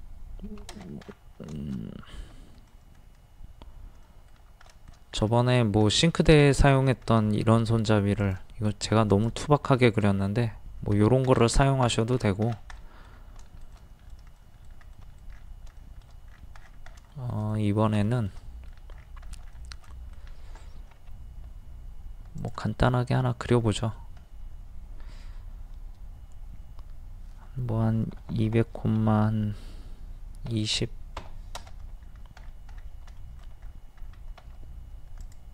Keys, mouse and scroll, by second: 0.4 Escape, 0.7 scroll down 1, 2.0 scroll up 1, 2.2 middle click, 5.2 scroll up 1, 5.9 middle click, 6.4-6.8 scroll up 1, 8.2 click, 8.7 middle click, 8.9 scroll up 1, 9.1 click, 9.6-10.0 scroll up 1, 11.0-11.6 scroll down 1, 12.8 middle click, 13.7 shift+middle click, 15.3-15.7 scroll down 1, 15.8 shift+middle click, 16.3-16.6 scroll down 1, 17.1 shift+scroll up 1, 17.1 shift+middle click, 18.1 shift+middle click, 19.0 scroll up 1, 19.6-20.9 shift+middle drag, 21.0 r, 22.4 click, 22.9-23.6 scroll up 1, 27.8 KP_2, 32.0-32.5 scroll up 1, 33.2 shift+middle click, 33.6-33.9 scroll up 1, 34.4 scroll up 1, 35.2 click.